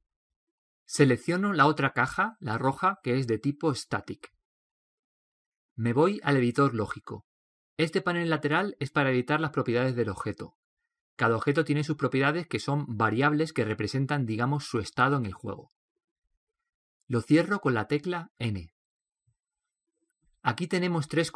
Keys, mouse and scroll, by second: 3.6-5.4 right drag, 5.4-9.9 middle drag, 9.9-19.2 right drag, 18.7 n.